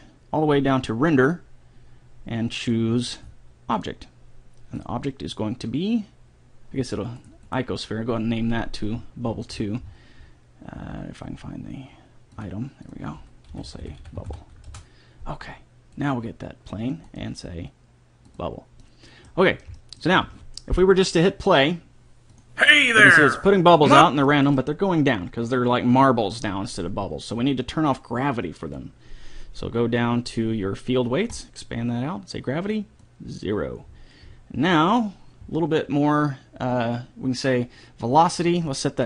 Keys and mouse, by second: 2.0 middle click, 3.1-6.9 drag, 7.9-9.5 right drag, 9.5-14.5 middle drag, 14.5 b, 16.4-19.2 drag, 19.3 middle click, 20.2-21.8 middle drag, 22.7-24.3 drag, 35.1-38.9 middle drag, 38.9-39.0 drag.